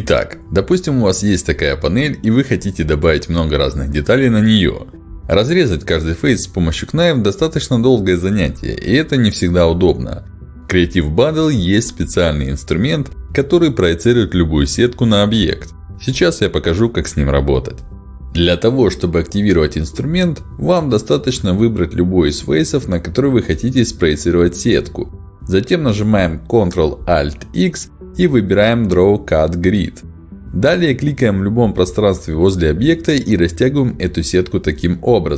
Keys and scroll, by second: 25.0 ctrl+alt+x.